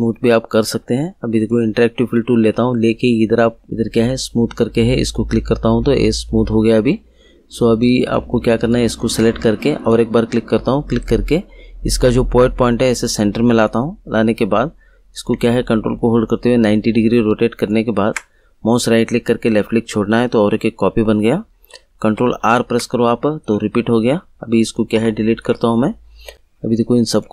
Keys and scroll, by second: 22.0 ctrl+r, 24.9 Delete.